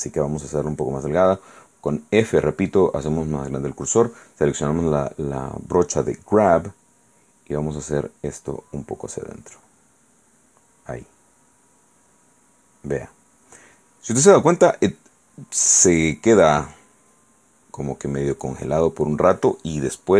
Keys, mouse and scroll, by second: 2.5 click, 7.8-9.8 drag, 16.4-19.0 drag.